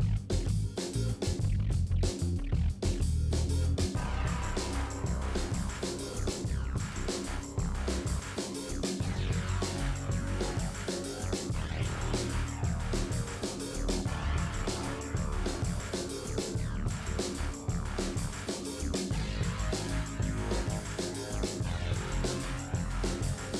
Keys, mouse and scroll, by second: 1.0-1.8 scroll up 12, 1.5 shift+middle click, 2.0 shift+middle click, 2.5 scroll up 3, 2.7 shift+middle click, 2.9 g, 3.6-4.2 scroll down 21, 4.2 shift+d, 4.8 shift+scroll up 7, 4.9 shift+middle click, 5.2 shift+middle click, 5.3 shift+scroll up 4, 5.5 shift+middle click, 5.9 g, 6.9-7.4 scroll down 20, 7.4 middle click, 7.9 click, 8.0 middle click, 8.2 click, 8.4 middle click, 8.5 scroll down 4, 8.6 middle click, 9.2 click, 10.5 alt+click, 11.4 click, 12.0 f, 12.3 middle click, 12.5 middle click, 13.1 scroll down 1, 13.2 middle click, 13.4 click, 13.6 scroll up 2, 13.8 middle click, 14.3 shift+middle click, 14.5 scroll up 1, 14.7 shift+middle click, 15.0 click, 15.3 ctrl+z, 15.4 ctrl+z, 15.8-17.1 ctrl+shift+drag, 17.1-18.2 middle drag, 18.3 alt+click, 18.4 scroll down 4, 18.6 scroll up 1, 18.9 Delete, 19.3 middle click, 20.5 middle click, 20.9 shift+a, 21.5 s, 22.9 e.